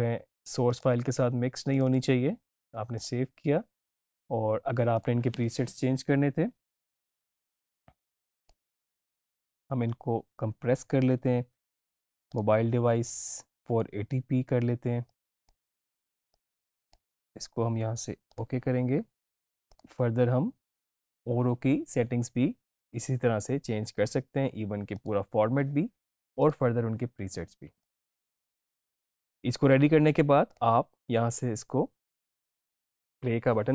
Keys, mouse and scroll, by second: 8.3 click, 9.0 click, 12.2 click, 15.0-18.4 drag, 24.8 click, 30.4 click.